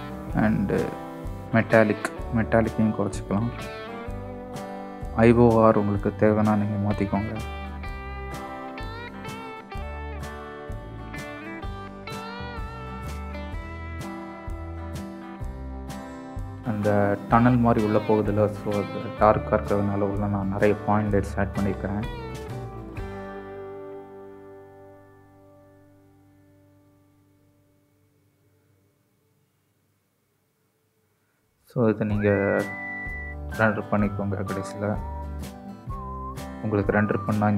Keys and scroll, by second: 15.1-16.0 typing, 15.2 Escape, 18.9 shift+a, 22.5-24.4 typing, 26.6 shift+d, 27.1 shift+d, 27.8 KP_0, 28.9 shift+d, 29.2 x, 29.6 shift+d, 30.0 KP_0, 34.6-37.1 typing, 36.5 Escape.